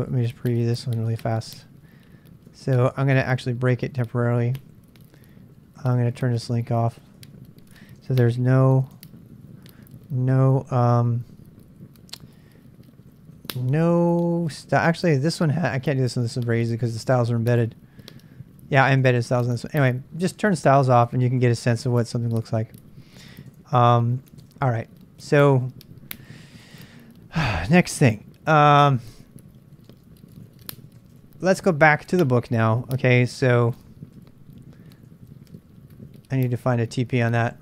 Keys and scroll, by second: 0.0-8.2 typing, 4.1 Return, 9.0 ctrl+[, 9.1 ctrl+j, 9.5-10.6 typing, 11.8-19.6 typing, 19.1 ctrl+[, 19.1 ctrl+j, 21.0-22.1 typing, 23.5 Return, 23.7-24.8 typing, 26.9 ctrl+a, 26.9 ctrl+a, 27.7 ctrl+a, 27.7-31.5 typing, 33.7 ctrl+[, 33.8-36.4 typing, 37.5 ctrl+[.